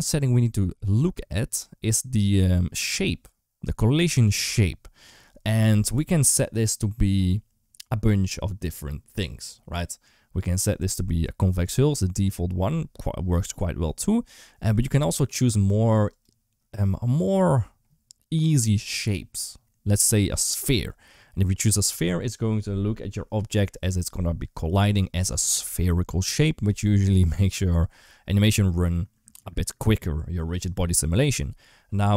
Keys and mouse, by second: 11.4-15.2 drag, 16.1-32.1 drag.